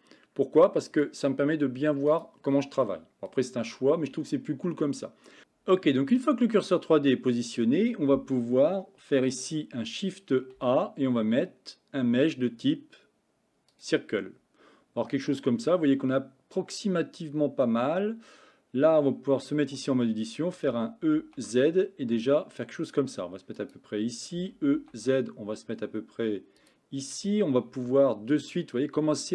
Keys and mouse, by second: 1.0-2.3 drag, 10.6 shift+a, 19.6 Tab, 20.7 e, 24.4 e, 27.8 s.